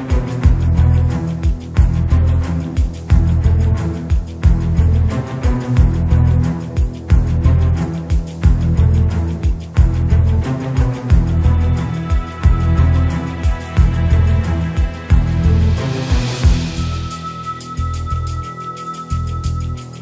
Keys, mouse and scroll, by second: 2.6 click, 3.9 click, 6.8 KP_0, 8.7 shift+d, 9.6 r, 10.5 KP_0, 13.4 click, 13.4 KP_0, 17.8-20.0 drag.